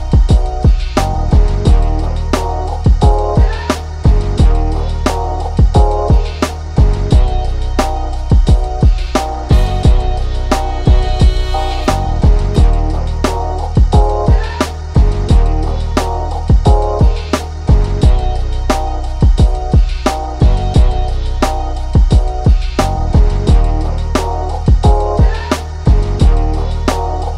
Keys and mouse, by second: 0.5 ctrl+shift+[, 1.6 click, 2.8-7.0 drag, 8.0 ctrl+shift+[, 9.4-11.7 drag, 11.7-13.5 alt+drag, 13.5 ctrl+d, 14.5 click, 15.1 shift+right click, 15.7 click, 17.7 ctrl+-, 18.6-19.6 drag, 20.7 click, 20.8 ctrl+=, 22.4-23.7 drag, 23.7 ctrl+z, 24.2 click.